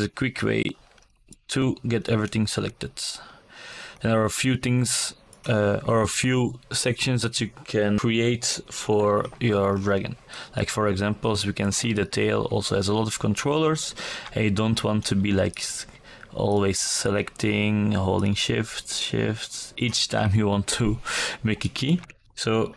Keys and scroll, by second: 21.2 alt+KP_2.